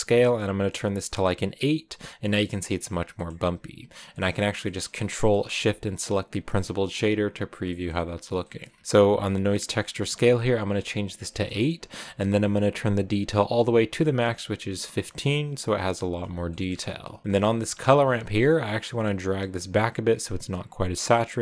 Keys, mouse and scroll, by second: 2.6-3.1 scroll down 4, 3.1 middle click, 4.0-4.4 scroll down 1, 4.4-6.2 middle drag, 6.2 ctrl+shift+click, 7.6 middle click, 8.0-9.1 scroll up 3, 9.1 click, 9.9 scroll up 1, 12.9-16.6 drag, 16.6-17.4 scroll up 3, 17.4-21.4 drag.